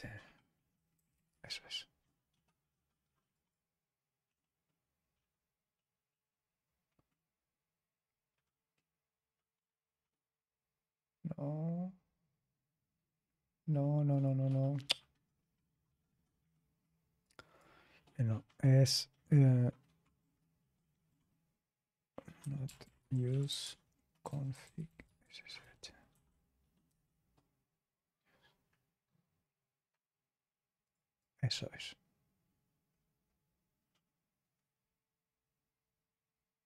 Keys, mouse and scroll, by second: 0.9 Down, 1.2-36.6 Left, 3.0-3.8 typing, 3.3 click, 4.9-6.3 scroll down 1, 6.3-7.4 scroll down 2, 7.0-7.8 typing, 8.0 scroll down 1, 10.1-10.8 typing, 10.3-11.9 scroll down 1, 11.9-13.1 scroll down 1, 12.0 typing, 13.1-14.0 scroll down 1, 14.0 click, 17.2 click, 22.1-26.0 typing, 26.8 Return, 30.8 click, 32.8-34.8 scroll down 2, 34.8-36.6 scroll down 3.